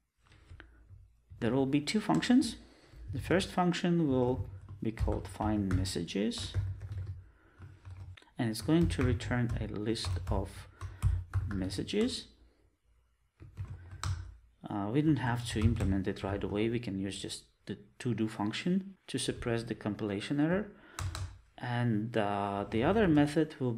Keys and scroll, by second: 12.0 Return.